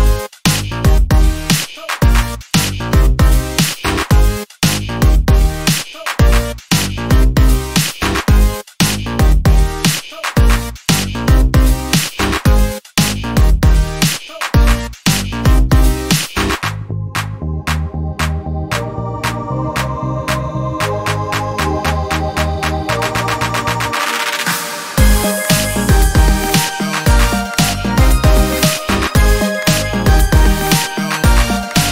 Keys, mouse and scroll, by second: 1.0 ctrl+shift+click, 3.7-4.1 ctrl+scroll up 2, 4.7 ctrl+click, 7.1 alt+Down, 8.7-9.2 ctrl+alt+scroll down 2, 9.5 ctrl+space, 11.5 d, 12.0 click, 13.4-13.8 scroll up 1, 14.3-19.7 ctrl+drag, 23.3-24.7 drag, 24.9-25.7 ctrl+scroll up 2, 26.0 ctrl+space, 27.0 ctrl+click, 27.6-31.0 ctrl+drag, 31.3-31.9 ctrl+scroll down 4.